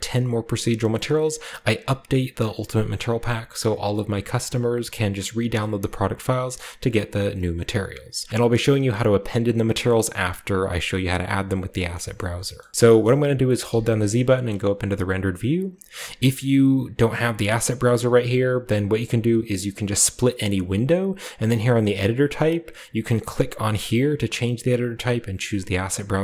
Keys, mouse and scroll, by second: 0.0 click, 0.3 click, 0.6 click, 1.8 click, 2.3 click, 2.7 click, 4.2 click, 4.7-7.7 scroll up 1, 5.1 click, 5.4 click, 6.9 click, 11.9 shift+middle click, 12.1 shift+middle drag, 12.1-13.6 scroll up 1, 12.6-13.8 shift+middle drag, 13.6-14.2 z, 17.4 click, 20.5 click, 23.2 click, 23.5 click.